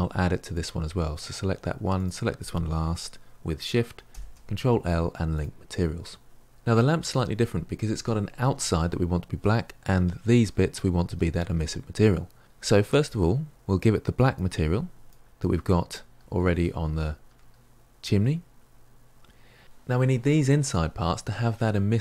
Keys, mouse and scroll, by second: 0.4 click, 2.0 shift+click, 5.4 ctrl+l, 6.5-7.6 middle drag, 7.6 click, 8.0-8.5 shift+middle drag, 8.5-9.7 scroll up 4, 9.7 scroll up 1, 15.0-15.6 drag, 15.6-16.9 scroll down 2, 16.9 scroll down 4, 19.5 scroll up 1, 19.6-21.6 shift+middle drag, 21.6-22.0 scroll down 1.